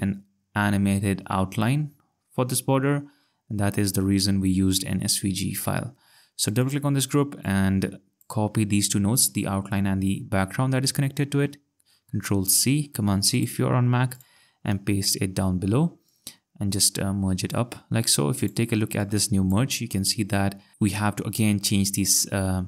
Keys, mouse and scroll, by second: 3.5-4.2 ctrl+scroll, 6.5 click, 12.1 ctrl+c, 13.3 click, 14.7 ctrl+v, 16.1 click, 18.4 click, 20.2 ctrl+scroll.